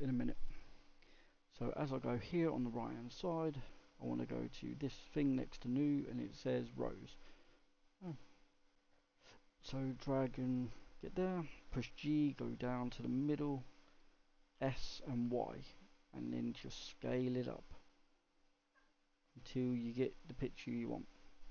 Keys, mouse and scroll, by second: 4.7-10.3 drag, 11.6 g, 14.5 s.